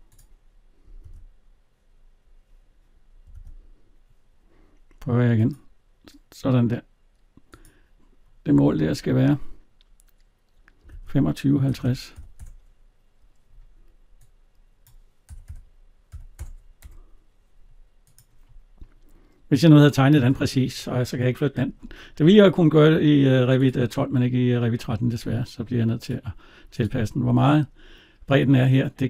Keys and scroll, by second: 0.8 alt+Tab, 8.4 alt+Tab, 16.6 Return, 27.1 alt+Tab.